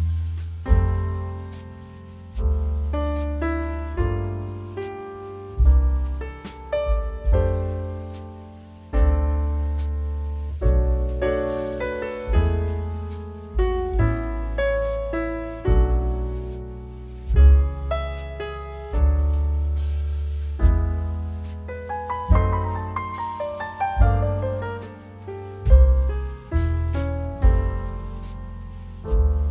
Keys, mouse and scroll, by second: 2.1 ctrl+d, 2.3 space, 2.5 click, 2.8 space, 3.6 click, 4.4 z, 4.6 click, 4.7 space, 4.8 click, 5.2 space, 5.6 j, 6.6-7.5 typing, 8.4 click, 10.8 right click, 11.1 click, 11.9-12.6 typing, 15.1 shift+j, 17.1-18.0 typing, 18.4 click, 21.5 click, 23.4 ], 23.9 click, 26.1 ctrl+z, 26.5 click, 27.6 space, 27.7 click, 28.1 space, 29.1 m, 29.3 click.